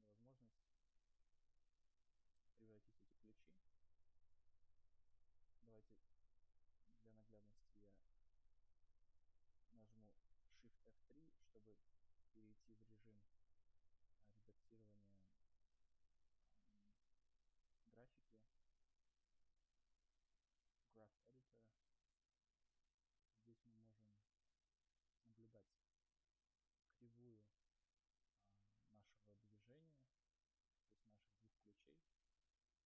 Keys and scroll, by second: 5.4 shift+F2, 11.1 shift+F3.